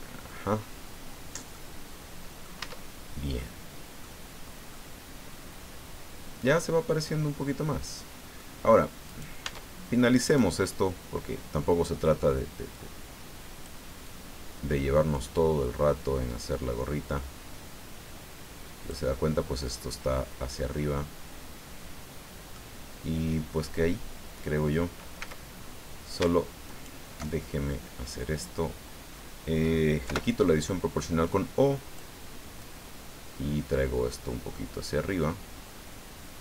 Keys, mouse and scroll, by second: 0.5-1.0 scroll up 2, 1.5 middle click, 2.2 click, 2.6 Tab, 3.0 scroll down 1, 3.3 click, 4.7-8.6 drag, 8.6 scroll up 1, 9.1 right click, 9.4 Tab, 10.2 right click, 12.7-13.8 drag, 14.0-15.4 drag, 15.4-15.9 scroll down 1, 16.3-16.6 scroll up 1, 19.1-22.7 middle drag, 25.2 a, 25.6-25.9 scroll up 1, 26.7 alt+shift+right click, 30.0 o, 31.2 click, 32.6-36.4 drag.